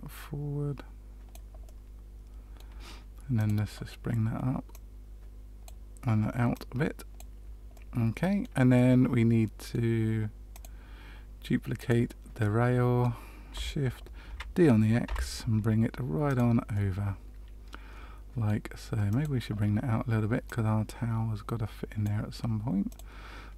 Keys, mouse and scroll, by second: 1.6 middle click, 3.3 click, 5.6 click, 6.5 click, 7.7 middle click, 8.7 middle click, 10.5 click, 11.7 click, 12.3 middle click, 14.2 shift+d, 16.7 middle click, 19.0 click, 20.4 click, 22.8 click.